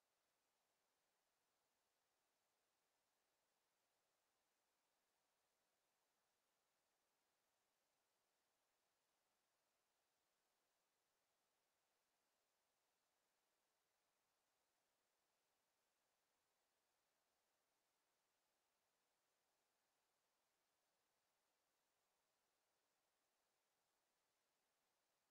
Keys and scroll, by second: 23.0 f, 24.6 f.